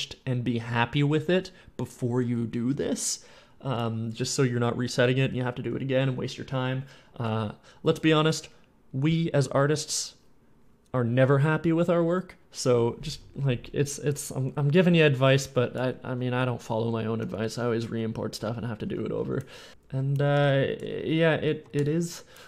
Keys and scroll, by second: 14.1 w, 15.8-19.0 typing, 20.2 F11, 20.7 F11, 21.4 w, 21.6 s, 22.0 s.